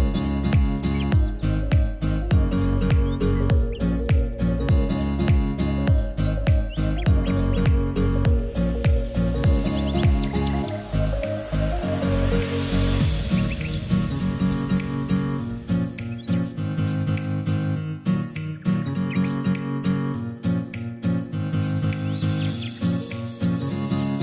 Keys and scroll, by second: 2.7-5.1 typing, 8.3-9.5 typing.